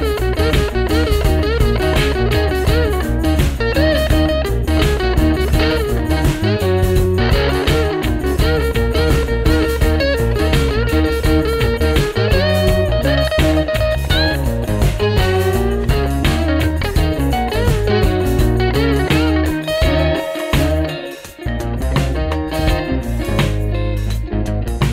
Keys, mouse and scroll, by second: 8.6 double click, 12.0 ctrl+0, 12.5 ctrl+-, 12.8 ctrl+-, 17.2 double click.